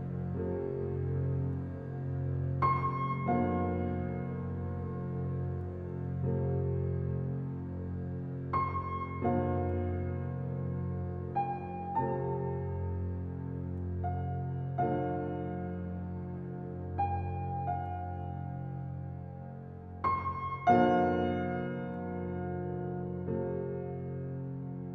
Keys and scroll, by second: 3.2 Right, 5.5 Right, 7.8 Left, 11.3 Right, 13.5 Right, 16.5 Right, 18.5 Right, 20.8 Right, 23.5 Right.